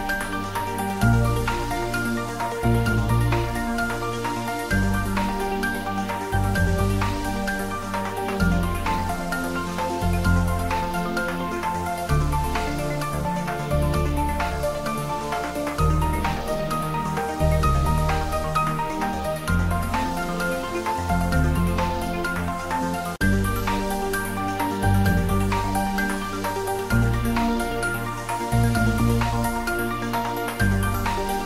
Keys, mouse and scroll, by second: 0.8 r, 1.4 click, 2.0 r, 2.5 click, 2.7 g, 3.5 click, 3.7 ctrl+s, 5.2 click, 5.8 ctrl+s, 6.1 shift+middle click, 6.7 ctrl+middle click, 7.1 shift+middle click, 7.5 ctrl+middle click, 7.9 click, 8.6 ctrl+middle click, 9.0 shift+middle click, 9.4-11.2 ctrl+middle drag, 11.7 Tab, 12.8 middle click, 14.8 click, 29.1 click, 30.2 3, 30.3 click, 30.5-31.4 middle drag.